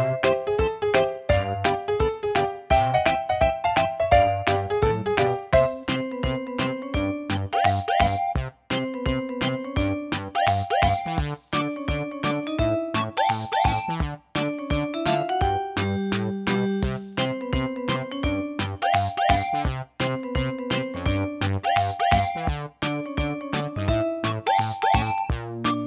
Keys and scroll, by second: 7.8 super+d, 10.1 typing.